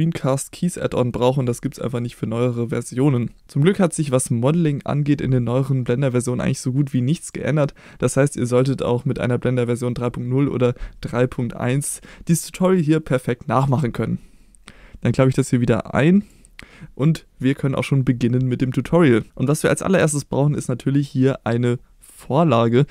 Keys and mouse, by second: 0.0-22.9 drag.